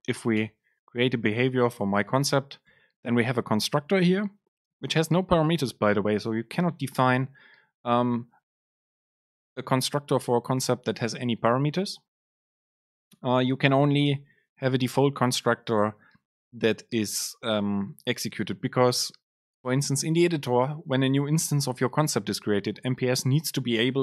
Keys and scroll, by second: 1.1 Down, 3.1 Down, 3.1 Up.